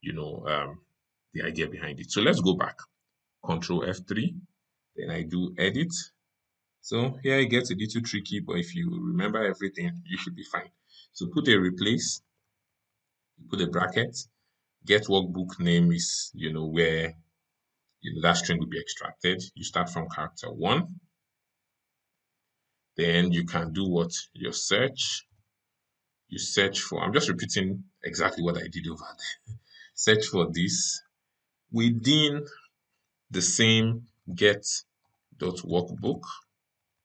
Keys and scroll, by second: 3.6 ctrl+F3.